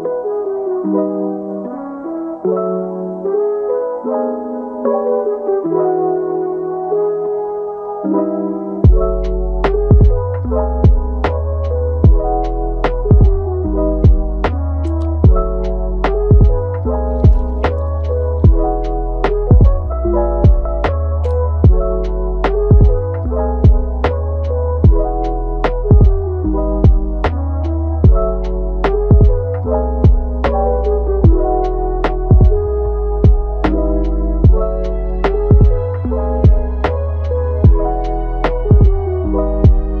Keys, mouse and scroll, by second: 1.3 click, 4.6 KP_1, 5.1 scroll up 4, 5.6-6.7 shift+middle drag, 6.7 g, 9.4 scroll down 2, 9.6-11.4 middle drag, 11.4 g, 12.2-13.3 middle drag, 13.3 Tab, 14.4 click, 15.1 click, 17.3 click, 17.7 ctrl+z, 19.6 ctrl+z, 21.9 ctrl+shift+z, 22.2 ctrl+shift+z, 23.0-24.3 middle drag, 24.3 click, 25.3 scroll up 4, 25.6-27.7 middle drag, 27.7 scroll down 2, 28.7-31.7 drag, 33.3-35.2 drag, 35.2-35.6 scroll down 2, 35.6 scroll up 1, 35.7-36.5 middle drag, 36.5 scroll down 2, 36.8-37.4 middle drag, 37.4-39.1 scroll up 1, 39.1-40.0 right drag.